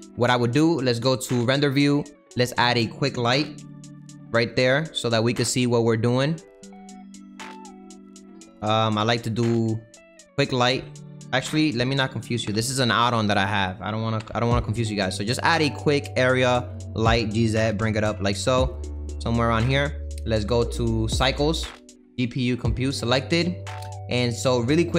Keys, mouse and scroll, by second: 1.3 click, 2.1 click, 2.5 click, 3.6 l, 14.2 Delete, 16.9 shift+a, 17.7 g, 21.5-24.6 drag, 24.6 middle click.